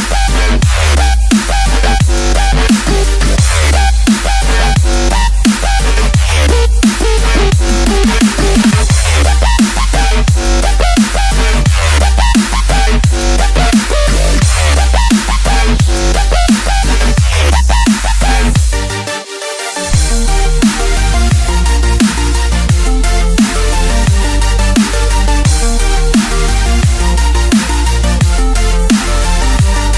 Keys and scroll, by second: 0.0-1.3 typing, 2.4 z, 3.5 z, 3.9 Escape, 3.9 space, 4.2 space, 4.4 ctrl+0, 5.0 ctrl+space, 6.6-8.4 typing, 11.4 space, 12.7-18.9 typing, 18.8 ctrl+z, 19.0 ctrl+z, 19.6 ctrl+z, 19.8 ctrl+z, 20.1 ctrl+z, 20.2-23.3 typing, 20.3 ctrl+z, 20.6 ctrl+0, 24.1 F5, 24.5-27.2 typing, 27.3 Return.